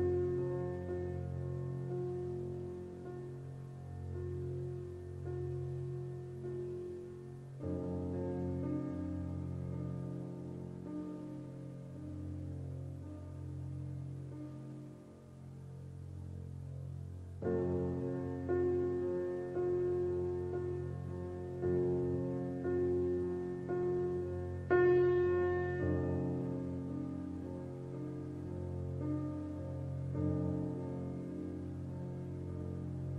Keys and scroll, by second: 28.7-31.7 typing.